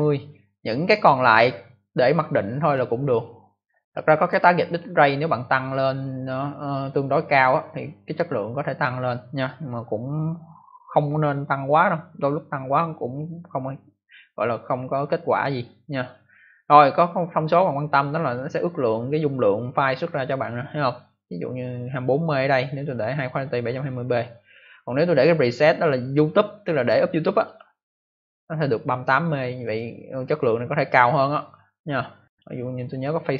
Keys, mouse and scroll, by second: 0.8 click, 24.9 click, 25.1 click, 25.8 scroll down 1, 27.4 click, 27.5 click, 32.2 click, 32.3 click.